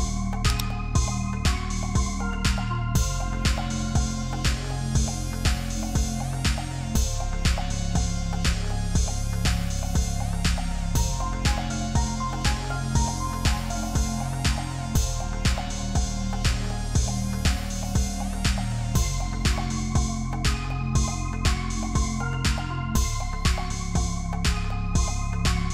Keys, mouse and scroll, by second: 3.2 ctrl+d, 7.3-8.1 alt+scroll down 1, 8.1 F10, 9.0 ctrl+click, 11.2 ctrl+click, 11.8 ctrl+g, 12.4 double click, 12.7-13.5 typing, 13.7 Return, 14.5-15.0 alt+scroll up 1, 15.5 ctrl+h, 16.2 right click, 17.4 shift+click, 20.1 double click, 22.5 double click, 24.7 double click.